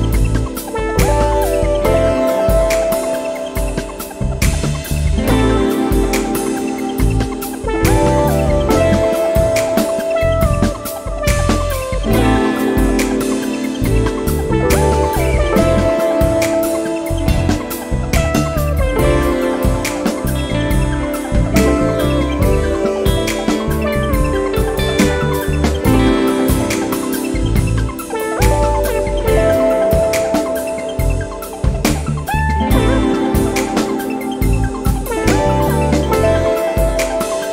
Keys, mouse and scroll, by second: 2.6 0, 4.2 click, 7.6 x, 8.3 0, 10.2 click, 10.9 1, 11.5 click, 13.8 scroll down 1, 15.4 click, 22.3 click, 24.6 2, 26.1-27.9 typing, 33.6 shift+8, 34.1 shift+p, 34.7 i, 37.0 click.